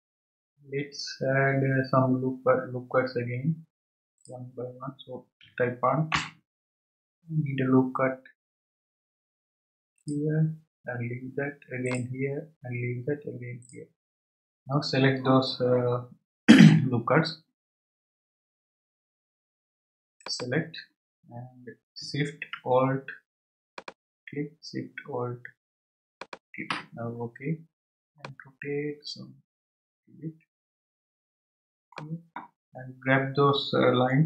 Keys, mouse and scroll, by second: 4.2-7.2 drag, 8.5-9.0 scroll up 2, 10.0-16.7 drag, 20.2-22.0 drag, 23.7 alt+shift+click, 26.1 alt+shift+click, 28.2-31.2 middle drag.